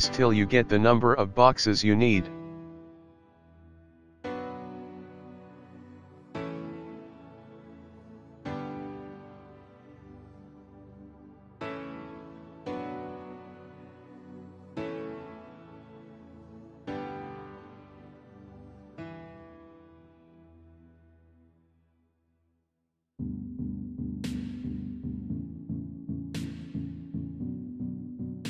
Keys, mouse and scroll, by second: 2.5 shift+d, 6.3 shift+d, 9.1 shift+d, 12.4 shift+d, 15.7 click, 16.1 middle click, 24.9 click, 28.3 click.